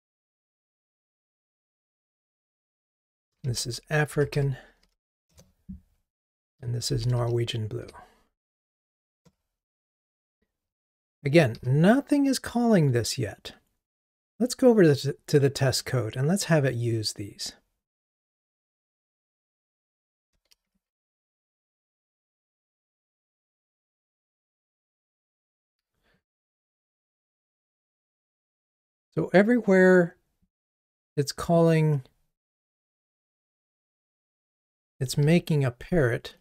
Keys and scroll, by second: 0.1 Delete, 5.4 Return, 11.6 ctrl+r, 18.5 ctrl+Tab, 20.7 super+1, 24.3 super+1, 24.4 Right, 25.0 Right, 35.4 shift+super+r.